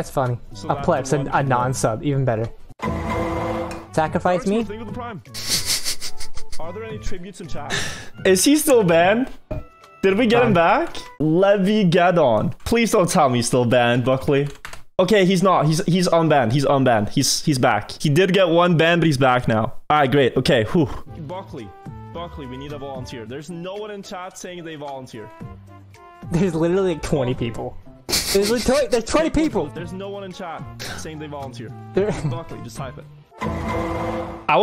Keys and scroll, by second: 0.3 Down, 2.2 Left, 9.9 Up, 21.1 Up, 21.6 Down, 21.9 Left, 22.2 Right, 22.5 Up, 22.5 Left, 22.8 Down, 22.8 Right, 24.1 Up, 24.1 Left, 24.2 Down.